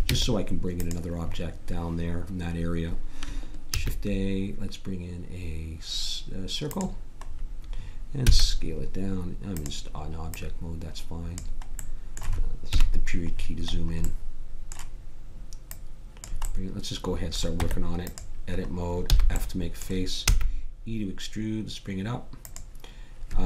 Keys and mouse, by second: 0.1 Tab, 3.7 shift+a, 8.2 s, 10.3-11.8 drag, 12.7 KP_Decimal, 15.7 middle click, 17.6 Tab, 19.1 f, 20.2 e.